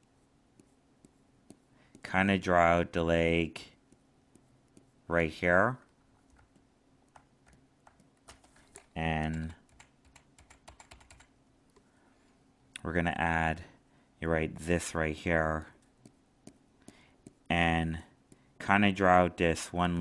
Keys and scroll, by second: 6.3 alt+space.